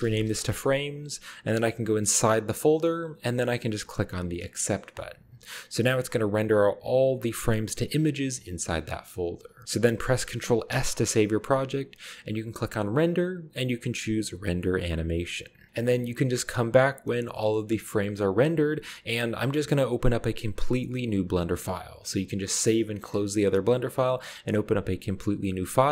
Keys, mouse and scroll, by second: 0.0-0.3 typing, 0.3 Return, 2.1 click, 2.3 click, 2.6 click, 4.4 click, 5.5 click, 9.0 click, 9.9 ctrl+b, 10.7 ctrl+s, 13.0-13.8 drag, 17.4 shift+middle click, 21.4-22.2 middle drag.